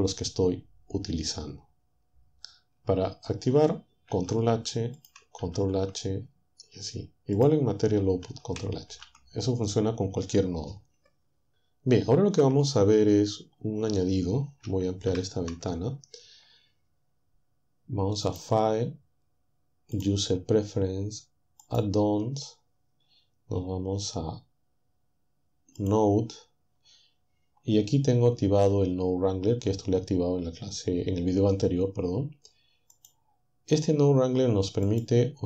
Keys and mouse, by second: 4.1 ctrl+h, 5.4 ctrl+h, 8.0 ctrl+h, 8.9 ctrl+h, 15.2 ctrl+Up, 18.3 click, 20.0 click, 21.6 click, 25.8 click, 33.0 click, 34.9 click.